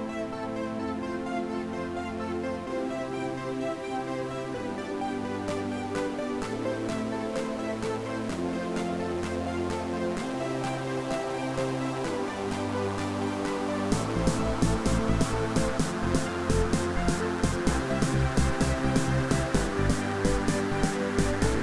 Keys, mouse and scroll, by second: 11.7 middle click, 12.0 space, 12.1 scroll down 3, 12.3-12.7 scroll up 8, 13.4 scroll down 6, 13.6 shift+middle click, 14.0 scroll down 1, 14.2 Right, 14.3-14.8 scroll up 4, 14.8 scroll down 7, 15.0 middle click, 15.2 s, 15.5-17.0 scroll up 1, 20.6 double click.